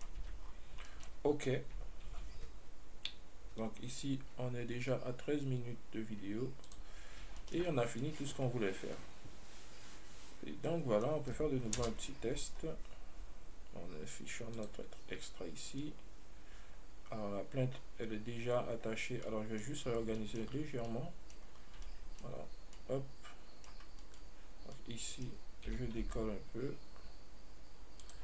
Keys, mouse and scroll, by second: 0.5 Tab, 0.7-1.1 scroll down 4, 1.1-1.6 shift+middle drag, 1.6-2.3 scroll up 1, 2.3 ctrl+s, 6.9 click, 7.7-11.3 shift+middle drag, 12.1 KP_0, 12.8-14.8 scroll up 1, 14.8 click, 15.9 right click, 19.5-20.1 middle drag, 20.1-21.1 scroll up 3, 20.5-20.9 shift+middle drag, 21.1-21.7 middle drag, 21.7-22.1 scroll up 2, 22.1-24.3 shift+middle drag, 24.3 right click, 25.0-26.0 middle drag, 26.0 g.